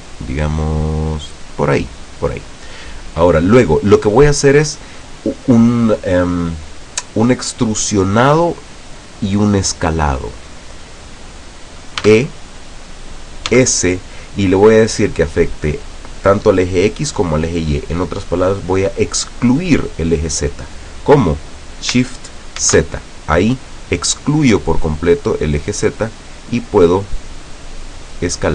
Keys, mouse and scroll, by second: 1.6 click, 12.1 e, 13.6 s, 22.7 shift+z, 28.1 click.